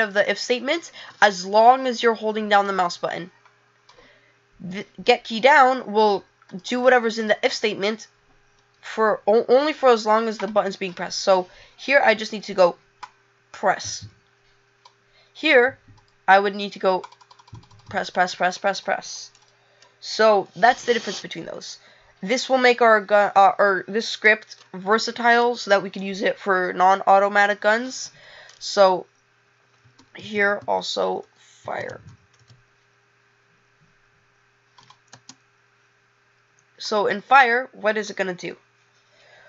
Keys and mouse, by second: 2.7 click, 3.9 click, 36.9 click.